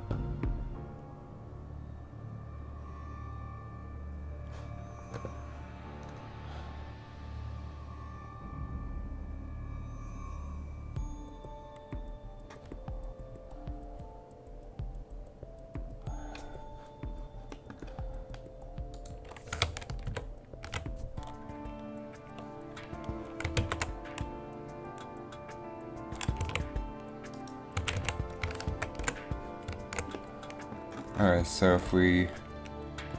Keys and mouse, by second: 19.0-20.3 drag, 20.3 ctrl+shift+v, 20.5 ctrl+shift+v, 25.7 ctrl+z, 26.6 a, 27.9 a, 28.1 a, 28.8 ctrl+c, 31.0 a.